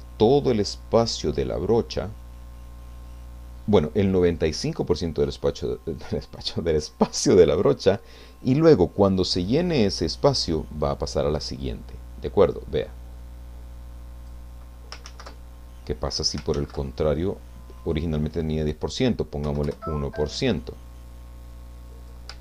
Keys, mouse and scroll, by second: 12.4-14.5 drag, 15.1 ctrl+z, 16.8 ctrl+z, 17.9 click, 19.4 1, 19.7 Return, 20.9-22.3 drag.